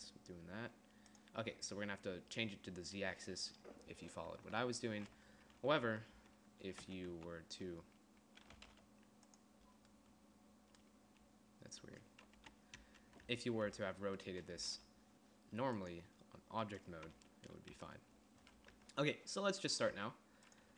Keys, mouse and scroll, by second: 0.1 g, 4.5 Tab, 6.1 Tab, 6.4 Tab, 7.0 r, 7.3 z, 8.8 r, 12.6 KP_2, 13.0 KP_1, 13.5 Tab, 13.9 Tab, 14.8 r, 17.9 KP_1, 19.0 Tab, 20.2 g.